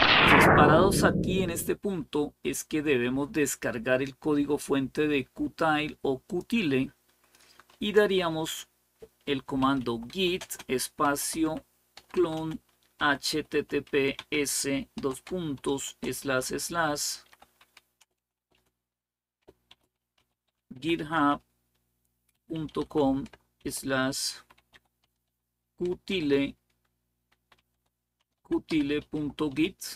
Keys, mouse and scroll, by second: 4.0-5.0 scroll down 1, 6.1 click, 9.2-15.6 typing, 16.7-18.3 typing, 19.5-29.8 typing.